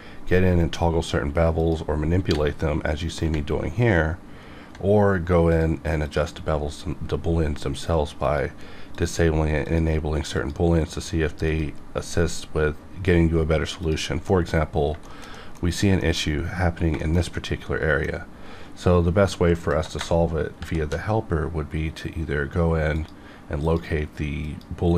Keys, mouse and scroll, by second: 2.3 click, 3.6-4.8 ctrl+scroll up 1, 5.5 click, 8.2 click, 13.8 click, 14.3 middle click, 14.6 scroll up 1, 15.0 shift+middle click, 15.4 middle click, 15.6 scroll up 1, 16.0 shift+middle click, 16.1 shift+middle click, 16.2 shift+scroll up 2, 16.4-16.7 scroll down 1, 16.9 scroll, 17.0 shift+middle click, 17.3-20.6 middle drag, 20.6 shift+b, 22.9 click.